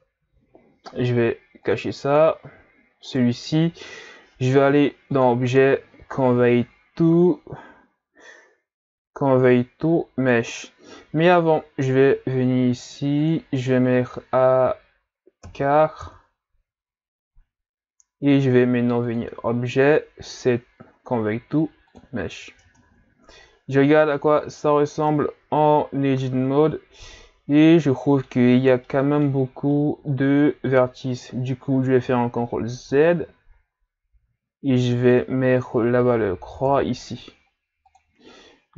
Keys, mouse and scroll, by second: 1.6 click, 2.1 click, 3.1 right click, 5.1-8.1 drag, 11.6-12.3 scroll up 12, 13.2-16.2 drag, 19.0-22.1 drag, 22.6 Tab, 23.4-23.7 scroll up 3, 24.4-25.1 scroll down 1, 25.1-28.1 middle drag, 28.9-32.0 middle drag, 32.0 ctrl+z, 33.0 ctrl+z, 34.9-38.0 drag.